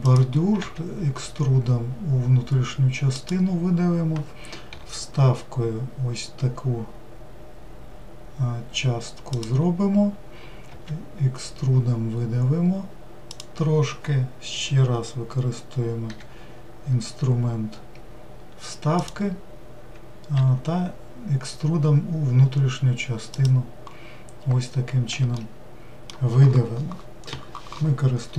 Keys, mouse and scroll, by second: 14.7-15.0 scroll up 2, 25.3-28.3 shift+middle drag.